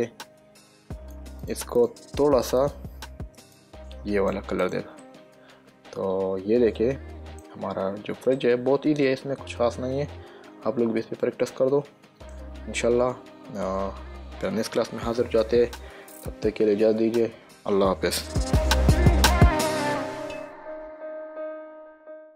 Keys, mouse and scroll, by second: 1.7 click, 4.9 click, 5.4 middle click, 8.7 middle click, 16.5 middle click.